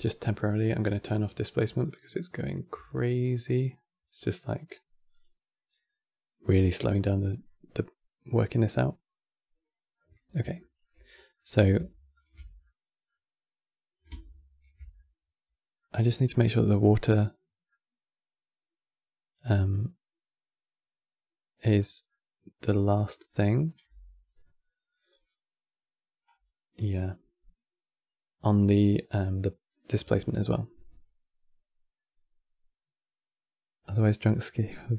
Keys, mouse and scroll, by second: 0.6-2.4 drag, 2.4 n, 4.8 click, 9.4 scroll down 1, 9.7-10.9 middle drag, 10.9 scroll down 4, 11.1 middle click, 11.8 ctrl+shift+click, 12.3-16.2 middle drag, 16.2 scroll up 3, 17.4-20.4 middle drag, 21.8-23.4 middle drag, 23.4-23.7 scroll down 2, 25.9-27.4 scroll up 7.